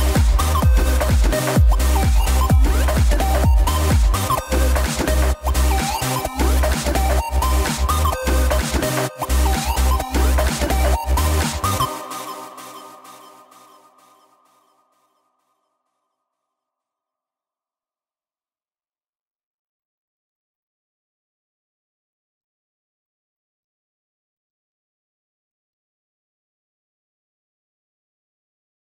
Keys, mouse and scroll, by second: 0.1 r, 5.2 KP_7, 6.4-7.0 scroll up 4, 8.9 r, 13.9 i, 15.6 KP_0, 17.4 click, 18.6-24.5 drag, 25.2-28.9 drag.